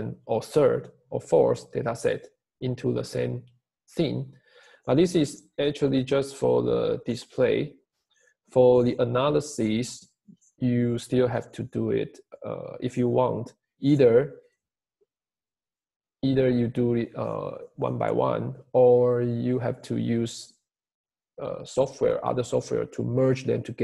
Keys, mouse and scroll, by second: 0.0 click.